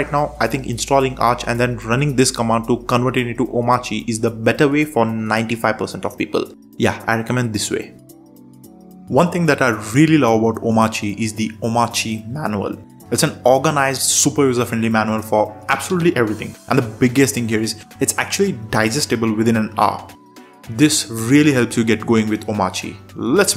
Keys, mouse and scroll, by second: 1.1 ctrl+shift+super+space, 1.8 Down, 1.9 Down, 2.1 Down, 2.2 Down, 2.3 Down, 2.4 Down, 3.0 Return, 5.4 super+3.